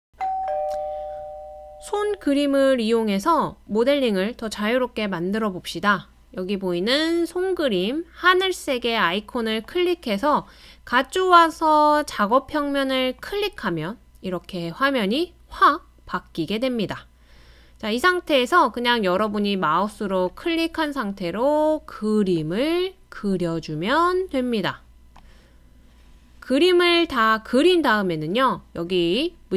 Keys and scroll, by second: 0.1 BackSpace.